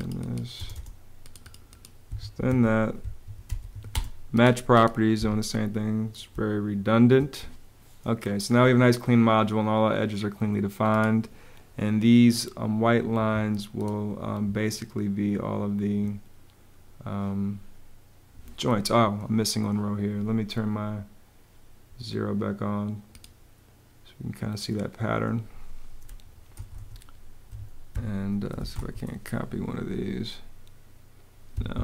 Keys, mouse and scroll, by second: 0.0-0.2 typing, 1.7 Escape, 2.1-3.9 typing, 2.7 Escape, 4.8 Escape, 6.0 space, 12.8 Escape, 26.0-28.8 typing, 27.6 Escape, 31.2 Escape.